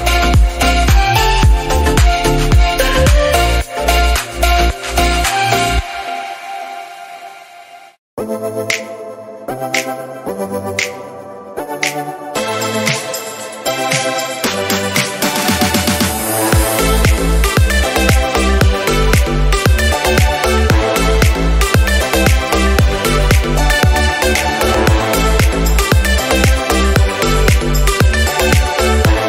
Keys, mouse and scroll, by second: 0.8 r, 3.7 click, 4.0 scroll up 2, 4.2-5.7 shift+middle drag, 5.7 click, 5.8 Tab, 7.1 click, 7.4 g, 9.0 click, 9.5 g, 11.4 click, 11.5 g, 14.3 Tab, 15.7 click, 16.3 click, 16.8 Tab, 17.0 Tab, 19.1 click, 19.5 Tab, 20.1 g, 22.3 click, 22.4 g, 23.8 click, 24.4 click, 24.7 g, 25.8 click, 25.9 g, 27.7 click.